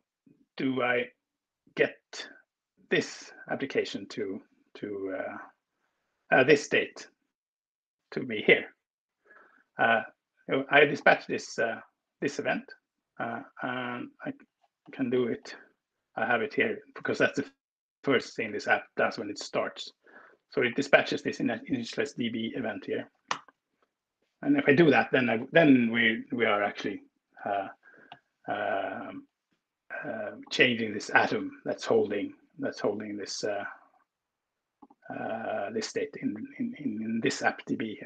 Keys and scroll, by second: 22.9 ctrl+Return.